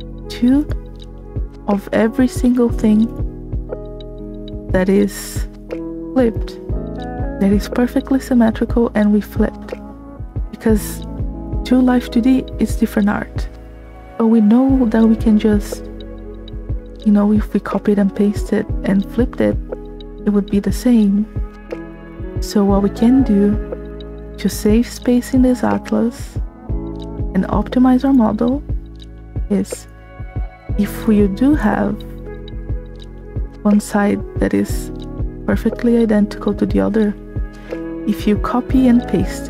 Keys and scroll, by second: 6.0 space.